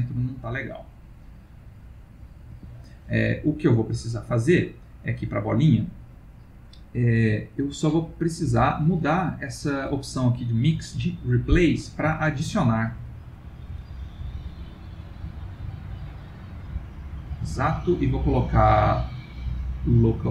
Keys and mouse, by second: 5.0 click, 11.5 click, 15.5 click, 17.8 click.